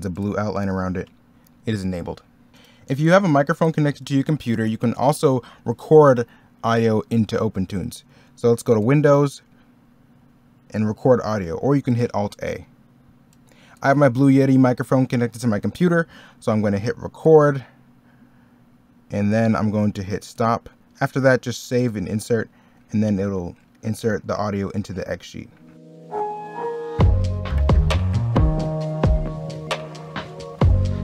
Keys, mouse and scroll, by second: 26.0 middle click, 26.2 e, 26.3 middle click, 27.2 middle click, 27.4 scroll up 1, 27.4 middle click, 27.9 scroll up 1, 29.4 middle click, 30.3 middle click.